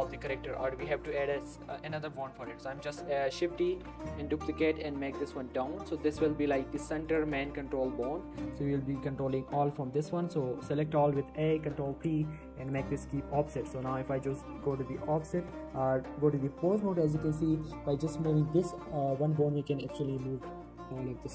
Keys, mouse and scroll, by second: 0.1 shift+middle click, 0.6 Tab, 1.2 shift+middle click, 1.3 shift+scroll up 1, 2.0 shift+middle click, 2.1 shift+scroll down 1, 3.5 shift+d, 3.6 shift+f, 3.8 z, 5.5 click, 5.8 shift+middle click, 6.0-6.3 scroll up 1, 6.5 s, 7.1 click, 7.2 g, 7.5 z, 8.4 click, 8.7 scroll down 1, 9.1 shift+middle click, 9.6 a, 11.8 ctrl+p, 12.7 click, 13.7 Tab, 14.3 click, 14.5 scroll down 1, 14.7 g, 15.3 right click, 15.7 scroll up 1, 16.4 g, 16.8 right click, 17.1 g, 17.4 right click, 17.6 shift+middle click, 18.2 right click, 18.6 shift+middle click, 19.1 right click, 20.1 click, 20.3-21.3 typing, 20.6 right click, 20.9 click, 21.2 right click.